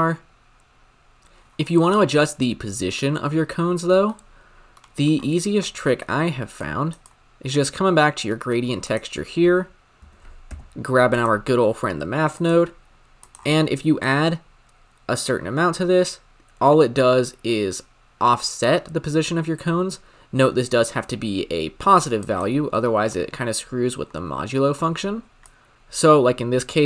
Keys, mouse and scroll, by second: 8.8-11.2 drag, 11.2 shift+a, 13.2 click, 13.4-14.0 scroll up 6, 14.0-17.0 shift+drag, 22.7 scroll down 5, 22.9-24.9 middle drag, 24.9-25.5 scroll up 5, 25.5 click.